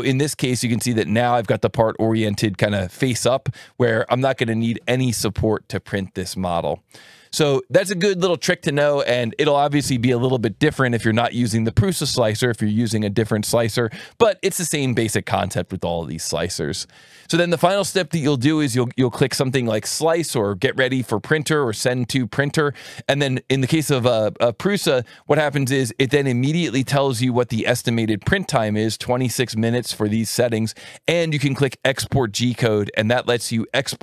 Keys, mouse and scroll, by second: 0.7 click, 20.0 click, 25.4 alt+1, 26.3 click, 27.3 ctrl+shift+click, 31.1-32.4 drag, 32.8 right click, 33.5 alt+1.